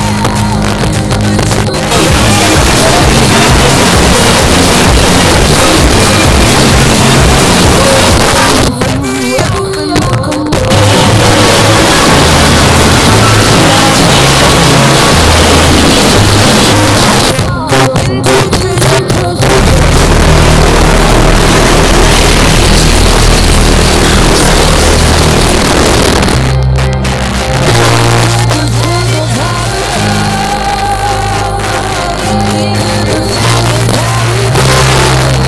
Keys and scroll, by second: 8.2 Page_Down, 16.7 Page_Down, 25.7 Page_Down.